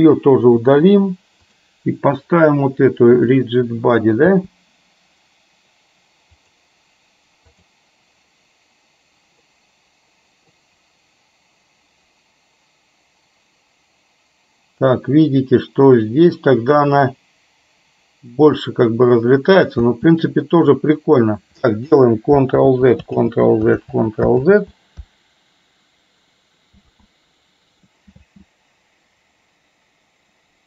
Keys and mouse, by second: 0.8 Delete, 1.6 click, 3.3 click, 4.5 space, 6.6-7.9 drag, 9.7 middle click, 15.1-17.0 middle drag, 19.9 space, 22.7 ctrl+z, 23.3 ctrl+z, 23.9 ctrl+z, 24.6 ctrl+z, 26.9 ctrl+z, 28.2 space.